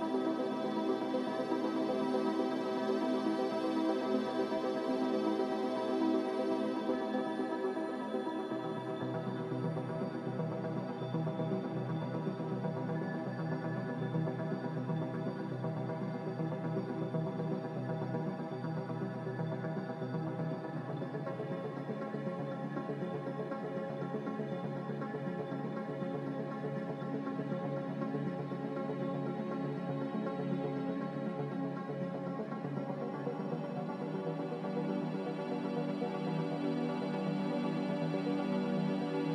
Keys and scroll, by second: 2.3-3.1 typing, 32.2 a, 38.7-39.3 typing.